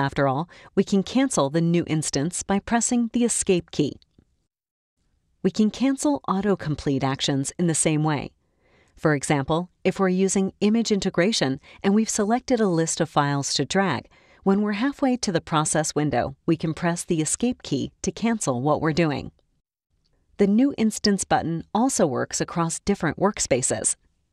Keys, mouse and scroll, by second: 4.8-10.1 drag, 17.3 Escape, 17.3-24.3 drag.